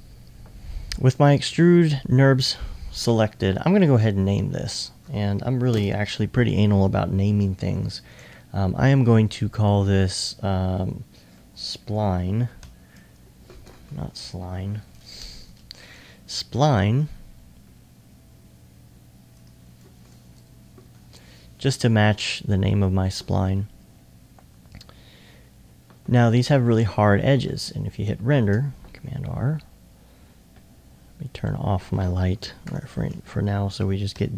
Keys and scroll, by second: 11.5 shift+s, 20.0 typing.